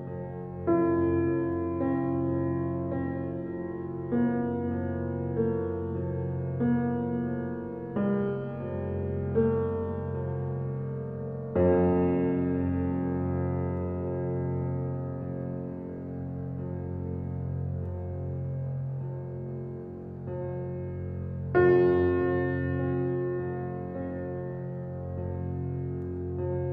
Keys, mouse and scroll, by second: 0.2 click, 1.8 click, 3.0-4.5 typing, 5.9 click, 10.5-11.0 scroll up 1, 12.5-13.6 scroll down 1, 15.1-15.6 scroll down 1, 16.2 c, 18.3-19.3 typing, 19.6 Return, 20.4 click, 24.4-26.3 typing.